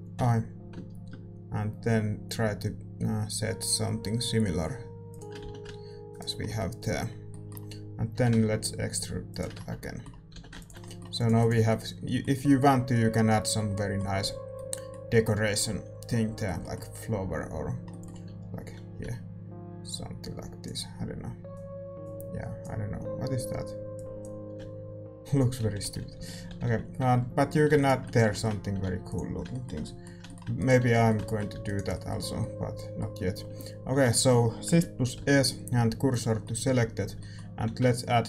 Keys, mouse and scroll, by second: 0.1 i, 5.4 a, 6.0-8.1 right drag, 6.4-9.5 middle drag, 8.1 e, 9.5 Tab, 9.7-11.1 middle drag, 10.3 a, 10.8 ctrl+s, 11.1-13.7 drag, 11.6 ctrl+s, 13.7-19.6 middle drag, 19.6-27.1 drag, 19.6-25.6 d, 25.6-27.1 ctrl+z, 27.1-34.0 middle drag, 28.0 ctrl+s, 30.5-32.3 right drag, 30.8 Tab, 31.5 a, 36.1 shift+s, 37.0 a.